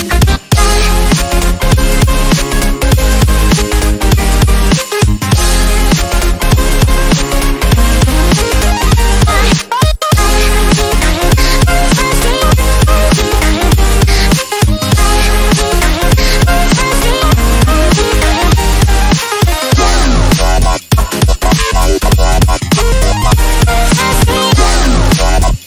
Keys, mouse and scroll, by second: 0.6-1.9 ctrl+alt+drag, 2.2-2.8 scroll down 2, 2.8 scroll down 1, 3.3 Delete, 3.9 ctrl+z, 4.6 click, 4.8-5.7 scroll down 1, 5.8-6.4 drag, 9.4 click, 15.3-16.1 drag, 21.4 click, 24.2 scroll up 1, 24.8 scroll up 1, 24.9 click.